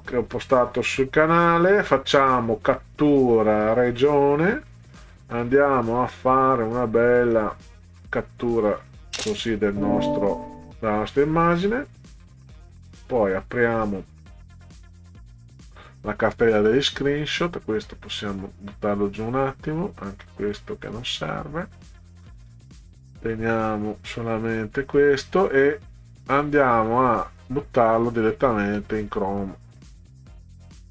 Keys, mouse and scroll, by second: 4.0 click, 5.4-8.8 drag, 11.7 click, 13.5 right click, 15.3 click, 18.1 click, 20.9 click, 21.3 scroll down 2, 21.8 click, 22.0 click, 23.6 click, 24.1 click, 25.4-27.9 drag, 28.7 scroll down 2.